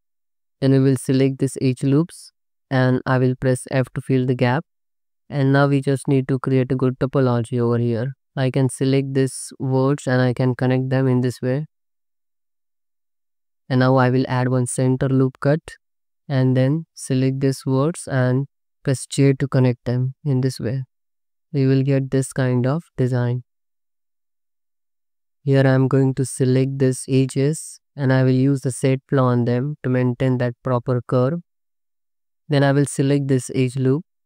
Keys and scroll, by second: 0.4 2, 2.8 f, 5.2 1, 6.2 space, 7.4 space, 7.5 ctrl+r, 7.8 ctrl+r, 8.4 space, 8.9 space, 10.2 space, 11.0 space, 11.3 c, 13.4 ctrl+x, 14.0 ctrl+r, 15.7 1, 19.2 j, 20.1 Tab, 21.8 alt+shift+z, 23.4 alt+shift+z, 24.3 Tab, 24.5 2, 25.4 alt+z, 31.7 1, 32.1 2.